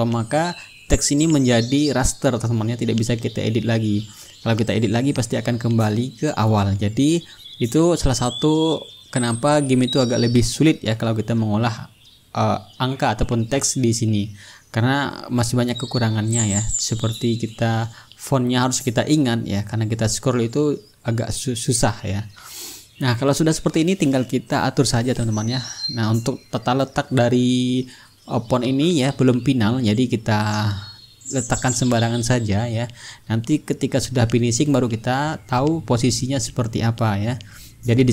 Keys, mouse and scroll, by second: 0.7 t, 1.0 click, 1.5 ctrl+a, 2.1 click, 3.5-5.7 typing, 7.1 click, 10.2-12.9 drag, 13.1-15.2 typing, 16.2 ctrl+a, 16.7 click, 17.4 KP_1, 17.6 KP_0, 18.4 Return, 19.8-24.0 drag, 22.1 t, 22.9 ctrl+a, 23.8 KP_5, 24.1 KP_0, 24.8 Return, 26.1-28.5 drag, 28.9-31.2 drag, 31.7-34.7 drag, 35.0 click, 37.7-38.1 middle drag.